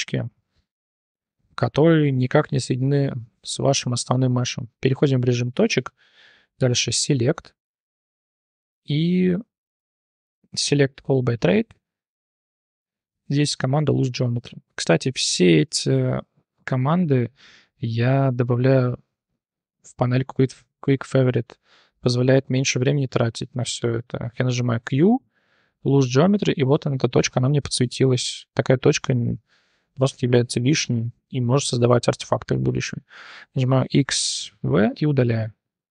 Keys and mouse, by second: 2.0 click, 3.3 1, 6.9-14.1 drag, 14.6 click, 16.3 shift+drag, 18.1 click, 19.9 q, 23.6 shift+click, 24.7 q, 27.2 t, 27.4 click, 27.8 g, 30.8 click, 33.7 x.